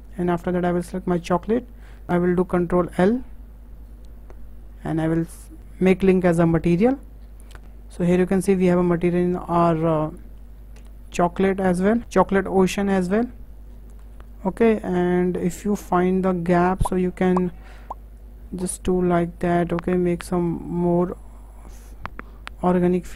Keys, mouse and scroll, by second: 1.2 shift+click, 2.9 ctrl+l, 7.6-9.7 shift+middle drag, 10.8 KP_0, 13.0 KP_0, 13.7-14.0 scroll up 6, 14.0-14.9 middle drag, 14.9-15.5 scroll up 8, 15.5-17.2 shift+middle drag, 17.2 click, 18.2 click, 21.0 KP_0.